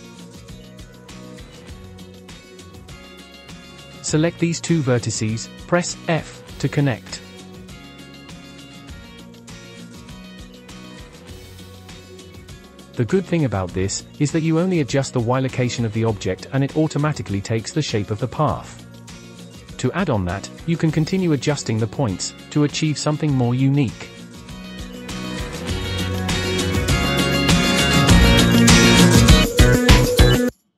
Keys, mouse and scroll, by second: 0.0-0.5 scroll down 1, 0.5 middle click, 0.8 scroll up 5, 1.1 middle click, 1.9 click, 2.0 middle click, 2.7 g, 4.3 shift+click, 5.7 f, 7.0 click, 7.2-7.9 scroll down 3, 7.9 click, 8.3 g, 8.9 scroll down 1, 9.1-10.9 middle drag, 10.9 Tab, 11.5-12.5 middle drag, 12.5 click, 15.2-18.1 drag, 18.7 click, 19.3 g, 20.3 click, 20.6 middle click, 21.5 Delete, 21.8 middle click, 22.2 click, 23.0 g, 23.6 middle click, 24.1 click, 24.2 middle click, 24.5 g, 25.2 middle click, 25.8 click, 26.1 g, 26.6 middle click, 27.2 KP_3, 27.7 g, 28.2 click, 28.5 g, 29.1 click, 29.5 g, 29.6 Tab, 29.8 click, 29.9 scroll down 2, 30.1 middle click, 30.6 click.